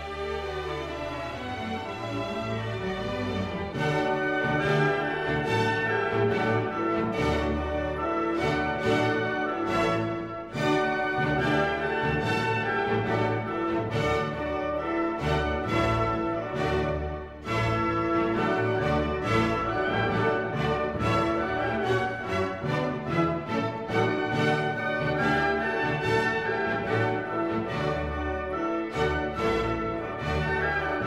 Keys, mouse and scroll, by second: 3.1-5.4 drag, 5.4 middle click, 6.0 click, 6.4 middle click, 7.4-13.9 drag, 13.9-22.2 drag, 22.2-26.3 drag.